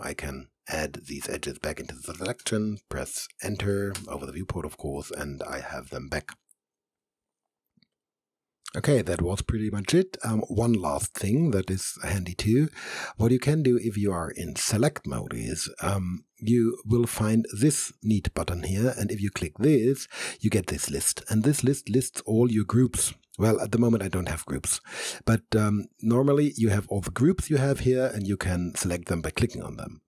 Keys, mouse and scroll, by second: 2.4 Return, 4.0 Return, 18.5 click, 26.1 click.